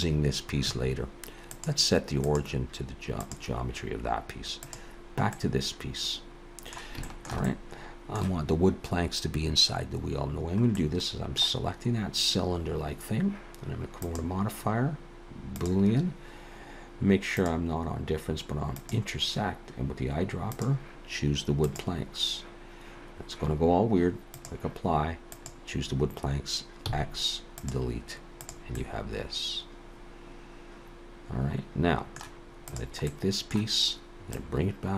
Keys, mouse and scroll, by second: 1.5 click, 4.6 click, 5.3 middle click, 7.0 shift+middle click, 7.5 middle click, 10.8 middle click, 14.0 click, 17.4 click, 20.5 click, 24.2 click, 25.2 click, 26.8 x, 28.4 click, 28.8 middle click, 32.7 click, 33.1 middle click, 34.3 click.